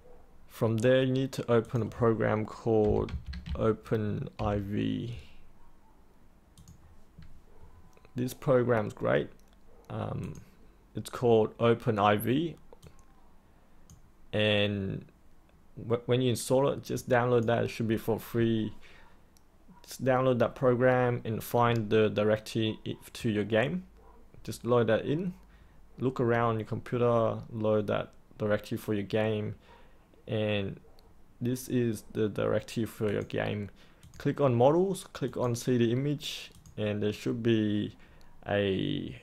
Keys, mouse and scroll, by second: 1.6 click, 2.6-4.3 typing, 6.5-39.2 drag.